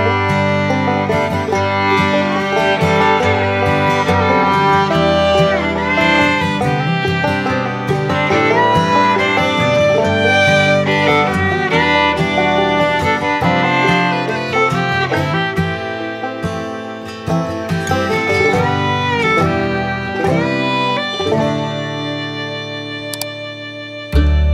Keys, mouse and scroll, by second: 2.6 click, 13.1 middle click, 14.3 click, 17.9 middle click, 20.5 shift+click, 20.9 middle click, 21.4 shift+middle click, 22.0 middle click.